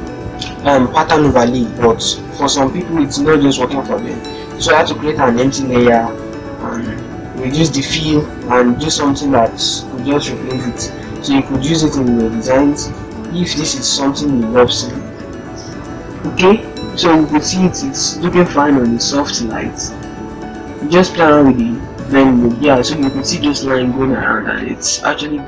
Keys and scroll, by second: 23.9 ctrl+-, 24.3 ctrl+0.